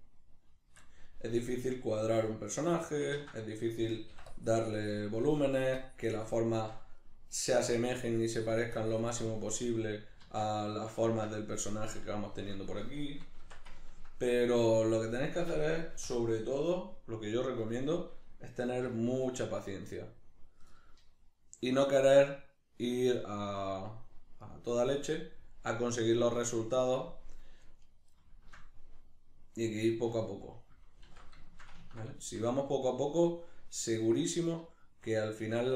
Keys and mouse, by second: 2.3-3.4 drag, 3.1 ctrl+z, 3.4 middle click, 4.3 click, 5.2 middle click, 5.8 click, 6.5-7.7 shift+middle drag, 7.7-9.2 drag, 9.2-10.7 middle drag, 10.2 alt+q, 13.4 Tab, 13.8 ctrl+middle click, 14.5 1, 14.8 right click, 16.0 o, 24.5 right click, 24.8 g, 25.5 click, 28.3-35.7 shift+middle drag, 30.1 g, 30.5 click, 31.1 alt+q.